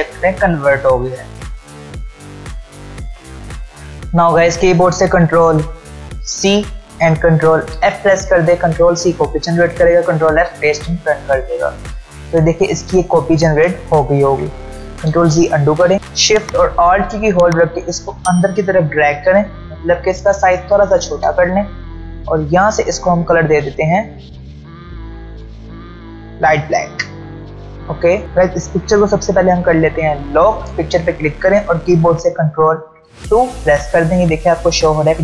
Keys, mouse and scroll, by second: 5.1 ctrl+Num_Lock, 6.3 ctrl+c, 7.7 ctrl+f, 13.0 click, 17.9-21.3 alt+shift+drag, 20.0-22.4 alt+shift+drag, 24.6 ctrl+alt+scroll up 1, 26.9-28.0 ctrl+alt+scroll down 2, 28.0 click, 29.9 click.